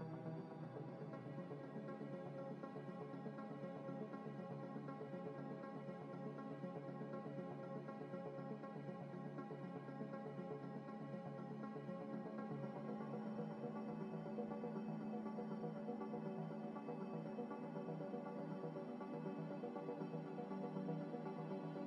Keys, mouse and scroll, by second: 0.1 Tab, 0.4-1.4 typing, 4.1 double click, 14.9 double click, 20.0 a, 20.5 a, 21.0 scroll down 1, 21.3 scroll up 1, 21.4 scroll down 1.